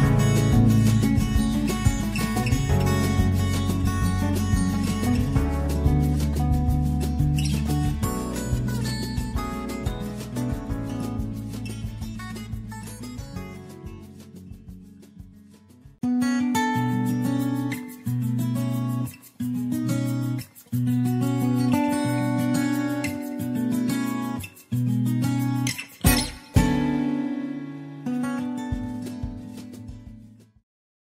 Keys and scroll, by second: 0.0 <, 2.6 <, 3.9 <, 6.1 <, 6.9 <, 7.8 Down, 9.6 Down, 12.4 -, 14.9 -, 17.4 <, 18.1 Left, 18.7 Right, 18.9 Left, 19.6 Left, 19.7 >, 21.2 ctrl+v, 21.4 ctrl+d, 21.6 ctrl+v, 21.9 t, 22.3 Down, 22.6 Down, 23.9-27.4 typing, 24.6 Left, 24.6 Right, 25.1 Left, 27.9 Down.